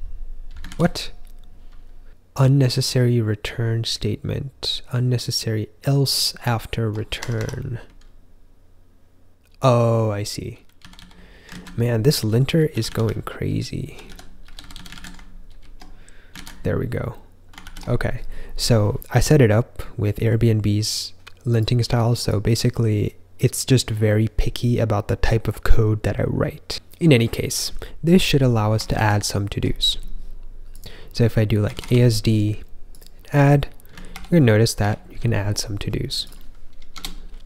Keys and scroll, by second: 0.6 super+r, 6.5 ctrl+k, 7.1 Escape, 7.3 Escape, 9.4-13.3 typing, 11.4 super+z, 14.9 super+s, 16.3 super+r, 17.8 ctrl+k, 29.2 ctrl+j, 31.3-32.2 typing, 34.1 super+=, 34.7 super+=, 36.9 BackSpace.